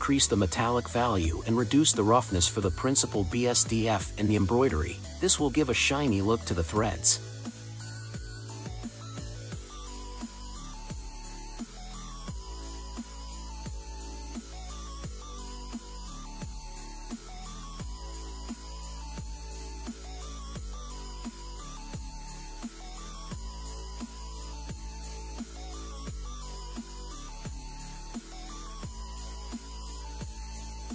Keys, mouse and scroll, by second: 4.6-7.8 drag, 9.9-11.3 middle drag, 11.3-12.0 scroll down 5, 12.0-15.0 middle drag, 15.5-17.3 scroll up 4, 17.3-20.3 middle drag, 20.7 click, 24.6-25.5 scroll up 2, 25.5-28.7 middle drag.